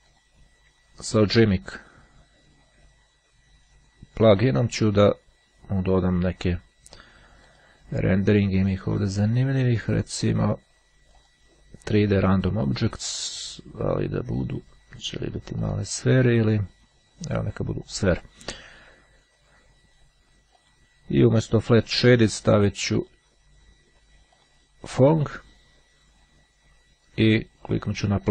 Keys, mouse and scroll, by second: 0.1 click, 1.5 click, 7.6 click, 8.6-9.3 scroll down 1, 11.3 click, 13.2 click, 14.5 click, 15.7 click, 16.9-18.5 drag, 20.1-21.3 drag, 23.1 click, 24.5 click, 25.4 click, 28.1 click.